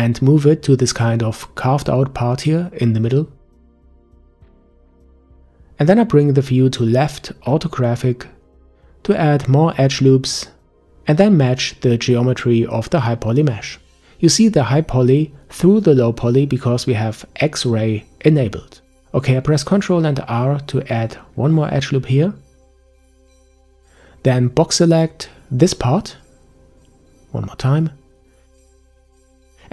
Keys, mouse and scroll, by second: 3.9-4.5 scroll down 1, 4.5-5.1 scroll down 1, 5.1-7.1 middle drag, 7.1-9.5 scroll up 5, 19.2 ctrl+r, 24.2 b, 26.3 a, 26.5 a, 27.3 b, 29.4 g.